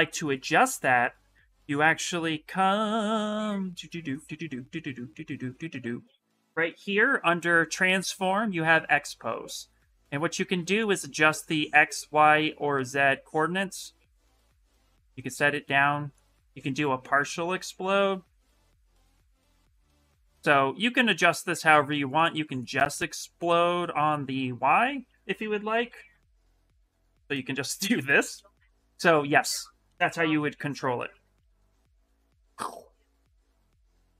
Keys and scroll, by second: 6.7 shift+m, 25.5 f, 26.0 f, 28.6 shift+x, 31.1 shift+m, 31.9 f, 33.0 f.